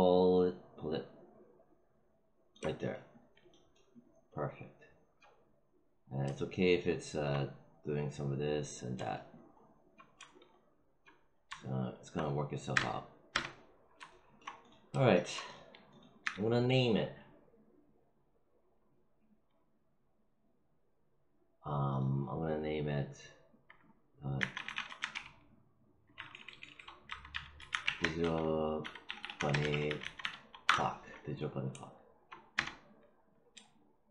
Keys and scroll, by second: 12.6 space, 16.1 w, 24.3-25.0 typing, 26.1-29.7 typing, 30.5 Return, 32.4 space.